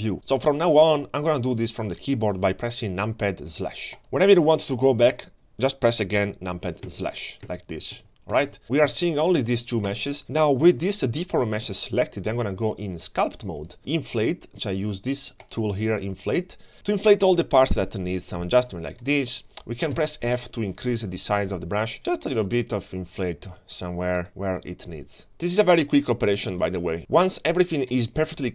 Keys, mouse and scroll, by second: 4.6-5.7 middle drag, 7.1 KP_Divide, 7.6 KP_Divide, 8.0 KP_Divide, 8.3 KP_Divide, 8.6 middle click, 8.6 click, 8.6 scroll down 2, 8.9 g, 10.2-10.8 scroll up 1, 10.8 g, 12.7-13.7 drag, 13.8 ctrl+space, 15.4 click, 17.2-19.0 drag, 19.0 middle click, 19.9 f, 20.7 shift+middle click, 21.1 middle click, 22.0 click, 22.6 scroll down 1, 22.9 middle click, 23.4 shift+middle click, 23.7-24.1 scroll up 1, 24.1-25.2 drag, 25.5 click, 25.8 ctrl+shift+middle click, 25.8-26.9 scroll up 7, 26.9 click, 27.0 middle click, 27.0 scroll up 1, 27.2-28.1 scroll down 3, 27.9-28.5 middle drag.